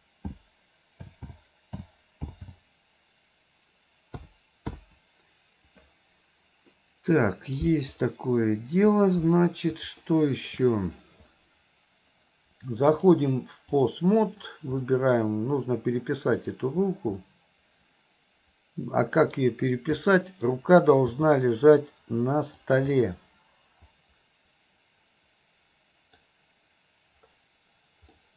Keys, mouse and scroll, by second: 6.8-7.6 middle drag, 10.1-10.5 middle drag, 12.9-14.0 drag, 14.9 middle click, 16.4 click, 17.3-19.4 middle drag, 20.1-20.5 middle drag, 21.1 g, 23.0-26.2 middle drag, 26.2-28.2 scroll down 1, 28.2-28.3 scroll up 1.